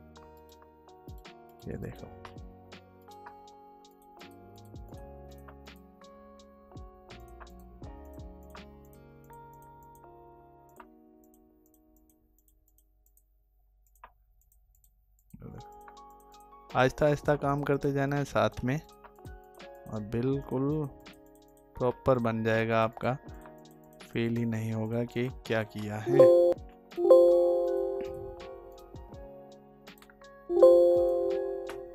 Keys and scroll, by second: 25.4 alt+space, 31.6 alt+space.